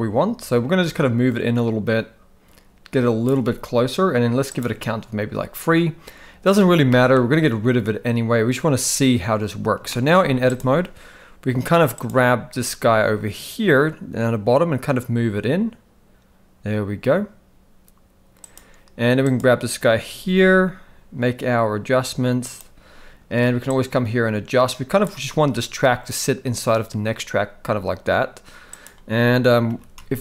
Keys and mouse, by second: 4.5 click, 6.9 shift+middle click, 9.9 shift+middle click, 11.9 click, 12.5 g, 19.3 click, 20.2 g, 23.8-25.0 shift+drag, 28.7 click, 29.7 g.